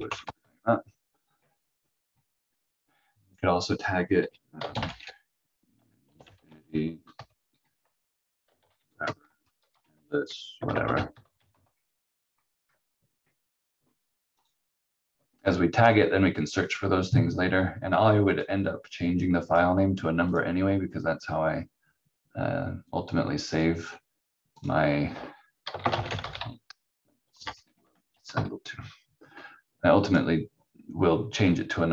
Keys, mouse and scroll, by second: 0.0-0.9 typing, 3.3 click, 4.5-7.1 typing, 8.3-12.0 typing, 14.4 click, 18.3 click, 24.5 click, 25.5-28.8 typing, 30.1 click.